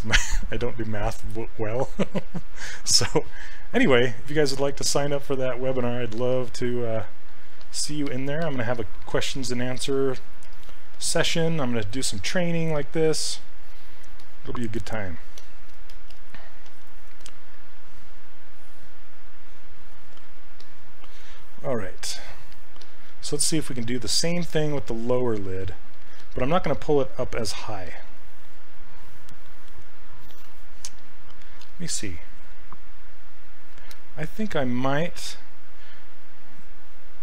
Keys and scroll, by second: 10.9 s, 26.2 s, 27.3 s.